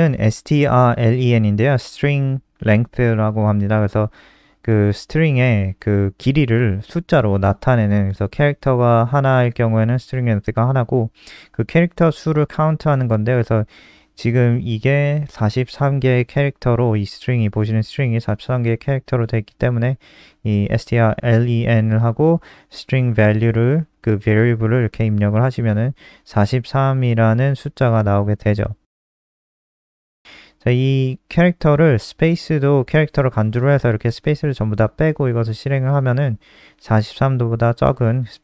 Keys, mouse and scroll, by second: 0.6-1.1 scroll down 1, 1.1 click, 1.6 Up, 1.8 Home, 2.0 shift+End, 2.3 shift+Down, 3.0 shift+End, 3.5 ctrl+c, 4.5 Left, 4.8 Left, 4.8 shift+Home, 4.9 shift+Up, 5.0 shift+Up, 6.1 Delete, 6.4 Down, 6.6 End, 6.9 Up, 7.1 Return, 7.3 Return, 15.4 click, 21.1 click, 21.4 ctrl+s, 22.3 F5, 34.0 click, 34.9 click, 35.4 Left, 35.6 BackSpace.